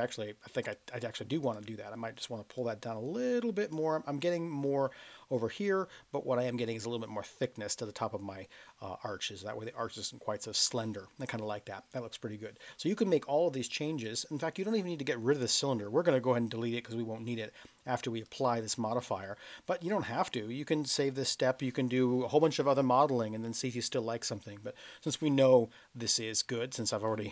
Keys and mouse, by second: 0.6 click, 1.5 click, 2.7-3.7 drag, 14.0 click, 26.9-27.3 middle drag.